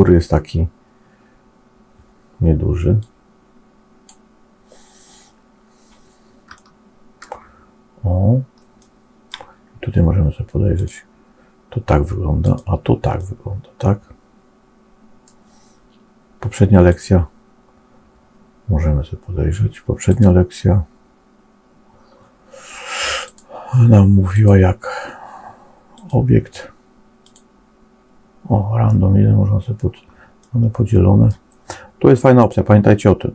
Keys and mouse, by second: 3.0-4.0 drag, 6.4 shift+middle click, 8.7 middle click, 10.6 click, 12.3 click, 13.1-15.2 middle drag, 16.8-21.3 drag, 23.1 click, 24.2-29.0 drag, 30.3 middle click, 32.4-33.3 drag.